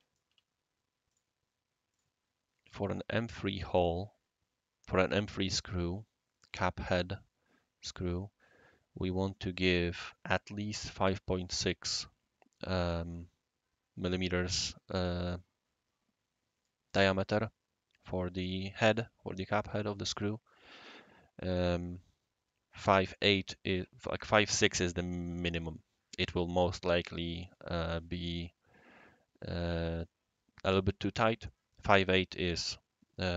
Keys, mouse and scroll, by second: 0.5 c, 1.1 click, 1.9 click.